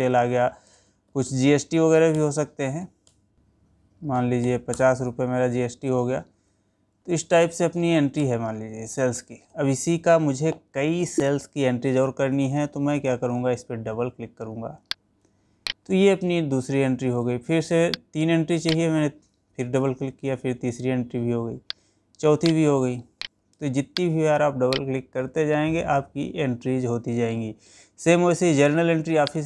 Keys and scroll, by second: 2.2 Down, 6.8 ctrl+a, 8.3 Down, 9.9 Escape, 11.6 Escape.